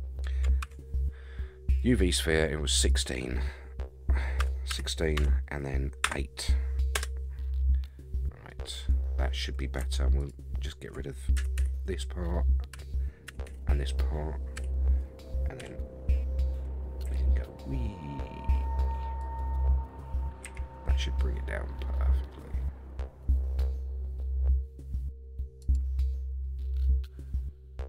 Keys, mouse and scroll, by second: 0.6 shift+a, 2.9-7.3 drag, 7.4-8.5 scroll down 13, 8.5-9.6 middle drag, 10.2 alt+click, 11.3 x, 12.7 l, 13.3 x, 15.6 l, 15.6 KP_3, 16.2-16.8 scroll up 1, 16.8 scroll up 2, 17.0 s, 19.6-20.4 scroll up 9, 20.4 s, 25.9-27.4 scroll up 7, 27.4-27.8 scroll up 6.